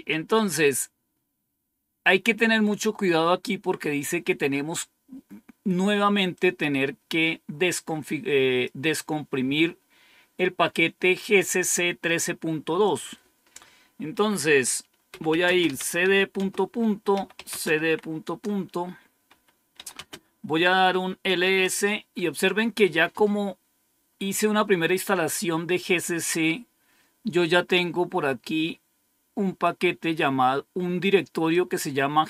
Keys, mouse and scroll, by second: 6.2-9.3 drag, 12.7 click, 14.7-18.2 typing, 19.2-19.9 typing, 21.3 typing, 24.0-27.0 scroll up 1, 27.0-28.4 scroll up 1, 27.7-28.4 typing, 29.5-31.6 drag.